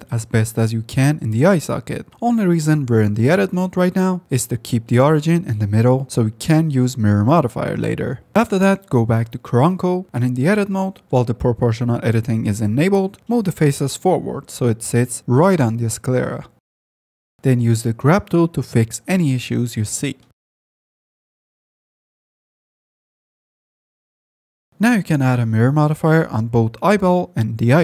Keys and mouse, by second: 0.7 s, 1.0 g, 1.2 g, 2.8 click, 3.3 s, 4.2 ctrl+z, 4.3 Tab, 4.5 s, 5.3 Tab, 6.9 g, 7.7 click, 8.3 click, 8.7 ctrl+click, 9.0 g, 11.4 2, 11.6 g, 14.1 g, 14.7 Tab, 14.9-15.5 drag, 15.6 Tab, 16.1 1, 16.3 g, 17.2 Tab, 17.5 middle click, 17.7 click, 17.9 ctrl+Tab, 18.0 f, 18.3 click, 18.8 click, 19.3 click, 19.7 click, 19.9 shift+click, 20.1 click, 20.5 f, 20.8 click, 21.8 click, 22.2 f, 22.4 click, 24.5 click, 24.6 f, 24.9-26.9 drag, 26.8 r.